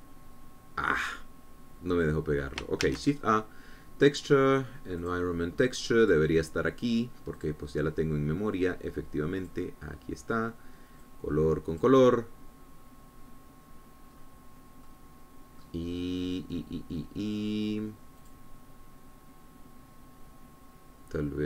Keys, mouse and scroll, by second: 0.3 ctrl+v, 3.2 scroll up 2, 4.0 shift+a, 6.1 click, 7.2 click, 8.5 click, 10.6 click, 12.2-13.2 drag, 14.7 scroll down 2, 15.2 scroll up 2, 16.0 middle click, 17.0-19.4 scroll down 1, 19.4 click.